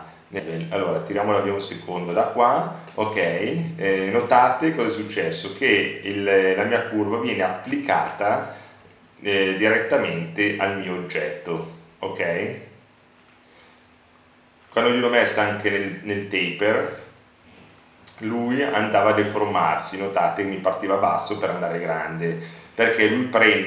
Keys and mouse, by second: 4.1-6.9 middle drag, 6.9 KP_Decimal, 8.8 Tab, 14.6 ctrl+z, 15.1 Tab, 20.8 Tab, 21.5 s.